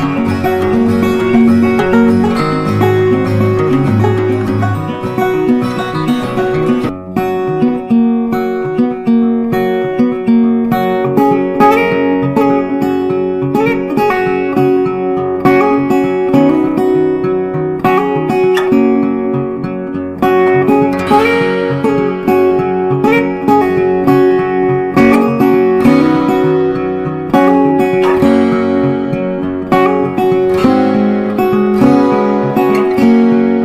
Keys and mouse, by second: 1.9 click, 3.7 space, 6.1-11.1 drag, 11.1-20.2 drag, 20.2 Down, 22.6 click, 24.8 right click, 26.3 click, 27.5 ctrl+a, 27.9-33.1 typing.